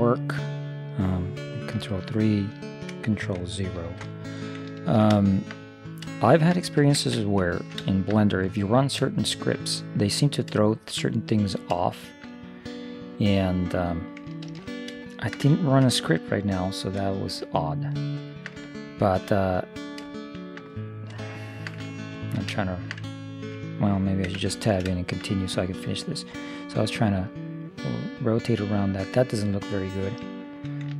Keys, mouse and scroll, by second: 1.8 ctrl+3, 3.9 ctrl+0, 6.7 middle click, 7.0 shift+space, 7.8 middle click, 8.0 middle click, 10.9-14.2 middle drag, 14.6 ctrl+3, 15.2-23.9 middle drag, 24.3 Tab, 25.6-27.0 middle drag, 25.9 click, 27.0 click, 27.1 middle click, 27.7 middle click, 27.9 middle click, 30.5 right click.